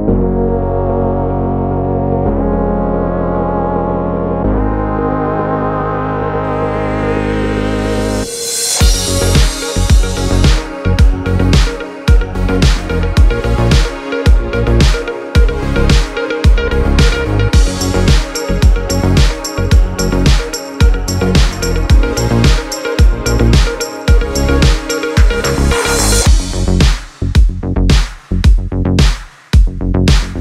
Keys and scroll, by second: 7.7 super+z, 14.9 super+z, 16.2 super+z.